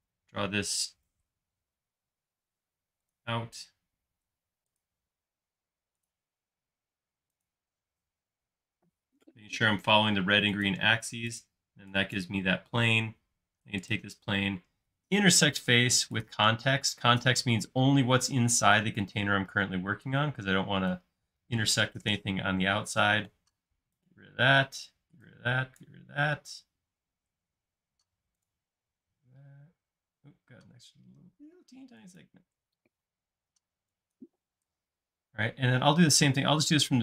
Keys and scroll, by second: 1.3 Left, 1.7 Right, 11.7-12.6 typing, 22.1 BackSpace, 23.6 e, 34.8 space.